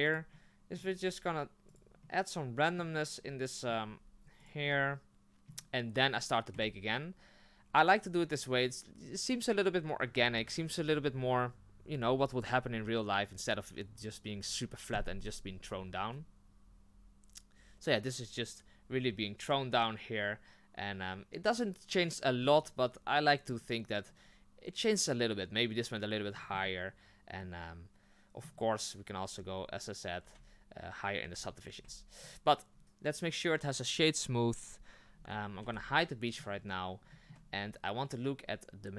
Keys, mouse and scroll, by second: 0.3 middle click, 0.9 r, 2.0-3.7 middle drag, 3.7 scroll down 1, 3.9 r, 4.7-11.2 middle drag, 11.2 click, 19.5-22.0 drag, 22.0-24.1 middle drag, 24.1 scroll up 2, 26.3-30.2 middle drag, 30.2 Tab, 31.2 Tab, 32.3 w, 32.7 scroll down 2, 32.8 right click, 35.6 h, 35.9-36.6 middle drag, 36.6 scroll up 3, 37.1 shift+middle drag, 37.3-37.6 shift+scroll up 3.